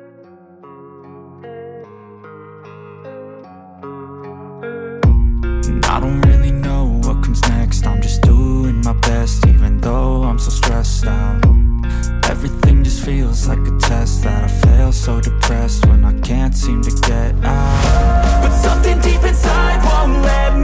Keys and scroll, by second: 0.0-7.5 typing, 3.3 Down, 3.4 Return, 9.2-11.3 typing, 11.5 ctrl+s, 15.7 Return, 15.8-20.4 typing.